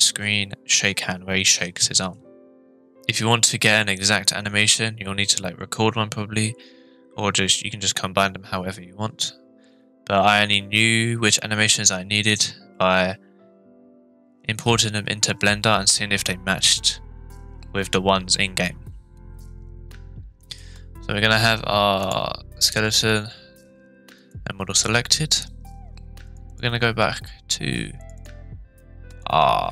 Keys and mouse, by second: 20.5 click, 22.1-22.9 drag, 24.3 click.